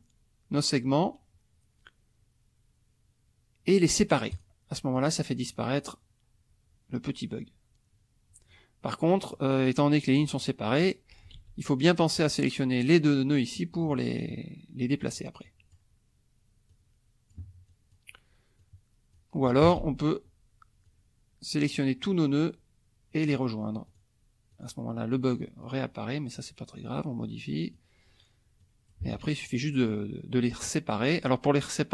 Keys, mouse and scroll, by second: 4.3 click, 4.9 click, 5.4 click, 8.5 click, 9.2 click, 10.2 click, 11.3 ctrl+z, 11.6 ctrl+click, 12.9-15.2 drag, 15.5 click, 16.7 click, 17.7 click, 18.6 click, 19.6 ctrl+a, 20.8-21.9 drag, 23.8 click, 24.5 click, 25.6 click, 27.2 click, 28.6 click, 29.1 ctrl+a.